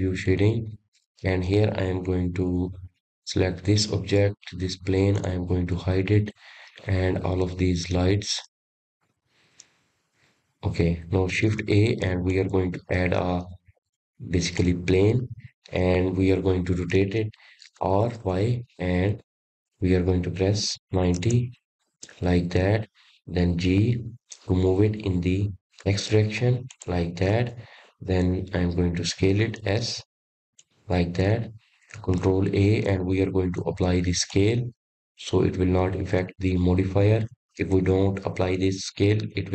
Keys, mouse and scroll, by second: 3.0 click, 3.8-6.4 middle drag, 6.4 click, 8.7 click, 12.1 click, 12.6 click, 15.0 shift+a, 21.3 r, 27.1 g, 32.9 s, 35.7 ctrl+a, 38.6-39.5 middle drag.